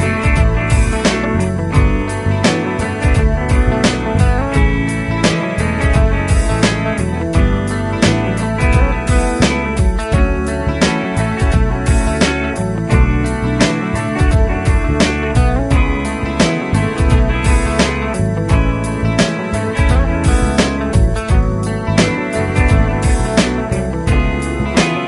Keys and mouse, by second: 1.2 typing, 4.4 right click, 8.0 Caps_Lock, 8.2 typing, 10.1-11.0 typing.